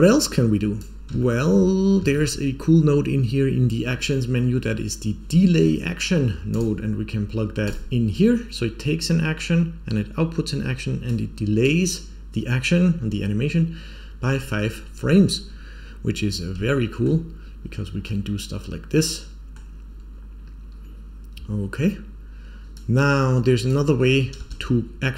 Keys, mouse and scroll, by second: 0.1-0.7 drag, 1.1 shift+middle click, 1.6-2.0 scroll up 2, 2.0 shift+a, 11.0-11.6 drag, 15.8-16.5 scroll down 2, 16.2 scroll up 1, 16.6 shift+middle click, 18.0-19.5 middle drag, 20.0-21.0 scroll down 2, 21.8-22.7 scroll up 1, 22.7-23.6 drag, 22.7 scroll up 1, 24.3 space.